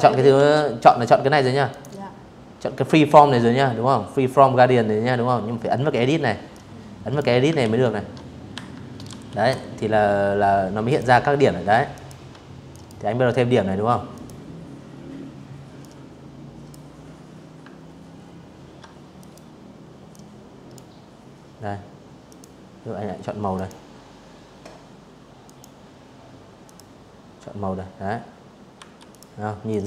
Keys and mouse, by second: 4.2 click, 5.3 ctrl+z, 6.2 Escape, 6.8 v, 8.5 click, 9.6 ctrl+click, 10.4 drag, 11.8 click, 13.5 click, 16.8 click, 17.8 click, 19.9 click, 21.2 click, 23.1 click, 24.3 click, 26.4 v, 26.7 click, 27.3 click, 28.9 click, 29.4 click.